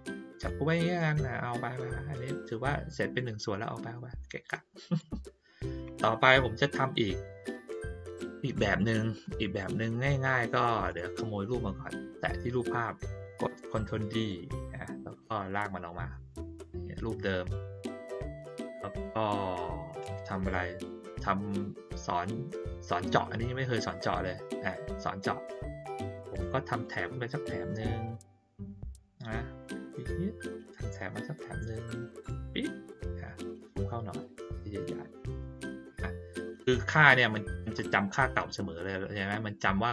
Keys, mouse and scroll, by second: 0.4-4.9 drag, 8.7-9.2 middle drag, 9.5 click, 10.8 click, 15.3-17.1 drag, 17.8 middle click, 26.7 click, 29.6-32.3 drag, 33.4 ctrl+scroll up 1, 34.1 ctrl+middle click, 34.5 middle click.